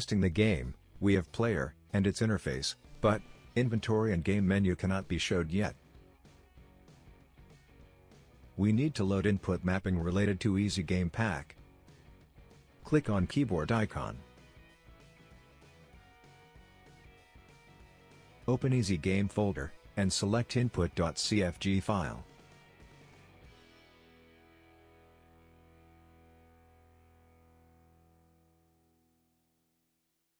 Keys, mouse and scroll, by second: 2.9-3.8 typing, 6.0 Tab, 6.7 Escape, 8.5-10.8 typing, 10.4 right click, 11.4 right click, 11.9 right drag, 12.1 right click, 14.9 click, 17.6 click, 20.9 click, 23.4 click, 25.1 click, 26.2-28.4 drag, 28.7-29.1 drag, 29.1 F5.